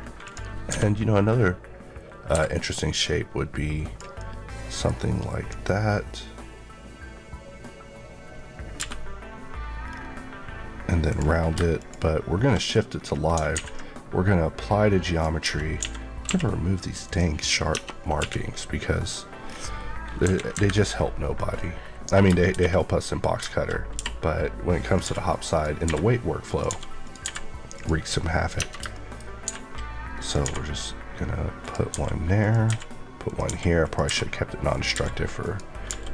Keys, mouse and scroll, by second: 0.2 click, 0.6 d, 2.2 Escape, 2.9 click, 4.1 middle click, 8.7 b, 9.7 scroll up 1, 11.0 click, 12.5 KP_Decimal, 12.9-13.5 scroll up 2, 13.5 ctrl+a, 15.0 click, 15.3 Tab, 15.7 a, 16.2 q, 17.0 click, 17.6 Tab, 17.9 scroll down 1, 18.1 q, 19.4 scroll down 1, 20.2 KP_1, 20.5 KP_3, 21.1-22.4 scroll down 1, 22.5 s, 23.9 r, 24.7 click, 25.0 g, 25.4 click, 25.8 r, 27.0 click, 27.2 r, 27.7 click, 28.1-28.6 scroll down 1, 28.9 middle click, 29.1 scroll up 1.